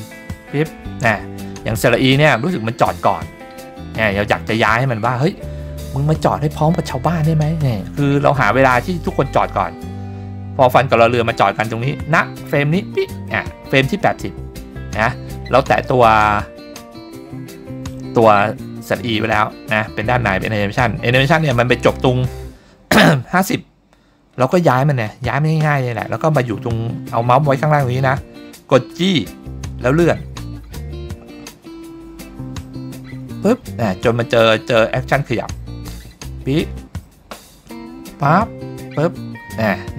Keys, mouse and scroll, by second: 1.9 click, 8.6-11.7 drag, 29.0 g.